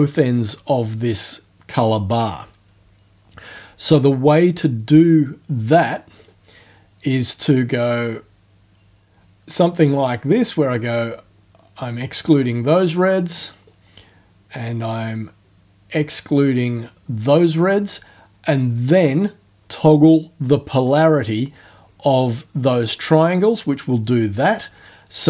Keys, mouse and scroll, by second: 6.2 click, 7.9-11.3 drag, 13.7-17.4 drag, 22.9 click.